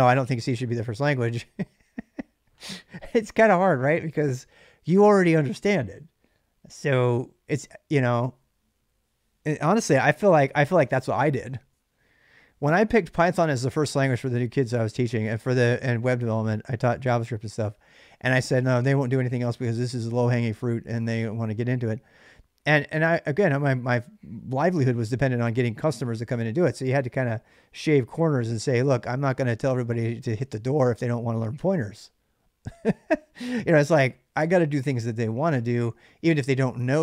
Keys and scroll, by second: 3.9 ctrl+[, 4.1-5.7 typing.